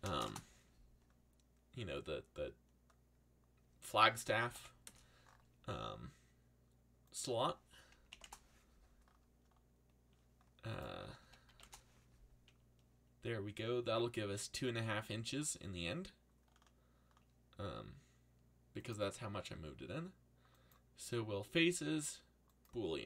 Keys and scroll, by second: 0.0-0.6 typing, 4.1-5.0 typing, 8.1 2, 8.2 Return, 10.7-11.9 typing.